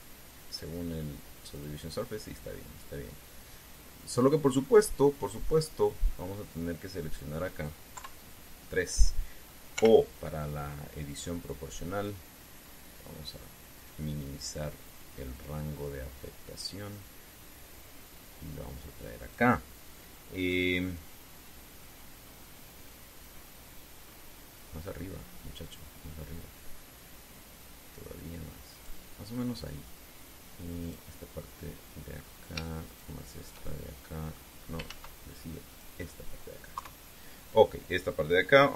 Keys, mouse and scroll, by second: 1.2 click, 2.3 click, 5.3-6.5 middle drag, 7.7 right click, 8.7 KP_3, 10.5 o, 12.8 click, 13.3-14.2 scroll up 2, 14.3-15.1 scroll up 1, 15.3-15.8 scroll up 1, 21.6-22.2 scroll down 1, 23.2-23.9 scroll down 1, 23.9-24.6 scroll up 1, 24.8 scroll up 1, 26.7-28.6 drag, 28.6 scroll down 1, 31.6 right click, 32.2 middle click, 33.6 shift+right click, 34.4 shift+middle click, 35.6 ctrl+z, 36.4 right click, 37.5 KP_3.